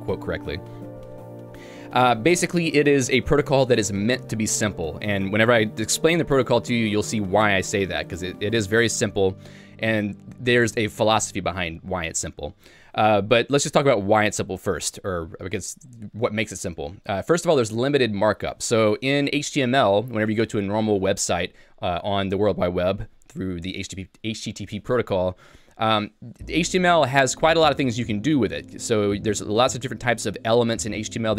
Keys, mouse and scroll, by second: 14.5 j.